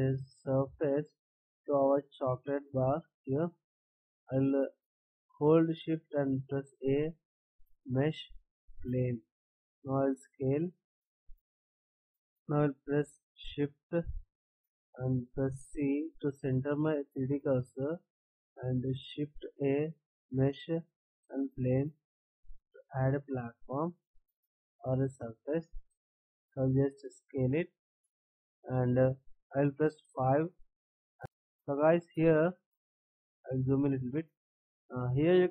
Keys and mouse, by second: 10.0 s, 23.4 s, 31.1-33.1 drag, 33.1-35.5 middle drag.